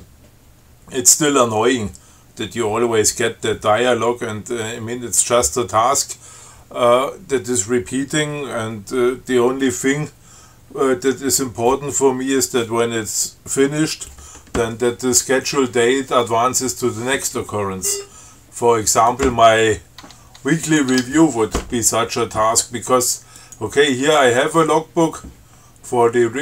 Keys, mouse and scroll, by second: 18.1 scroll up 2, 19.3 click, 20.3 Tab, 20.9 click, 21.2 Tab, 23.6 click, 24.3 Tab.